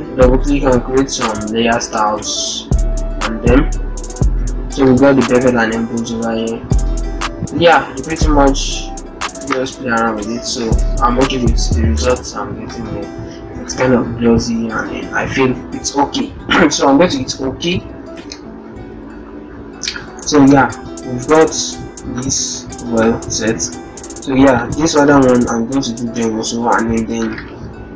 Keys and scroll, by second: 26.0 ctrl+g.